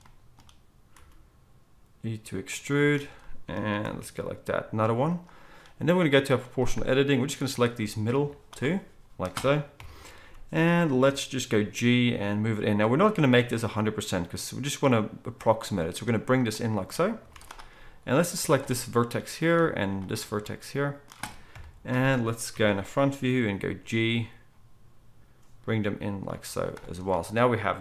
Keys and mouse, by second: 0.9 e, 8.1-17.2 drag, 8.1-19.1 middle drag, 8.1 z, 9.7 KP_1, 10.1 z, 11.5 g, 17.2 z, 21.5 KP_1, 22.5 z, 23.5 g, 26.5 z.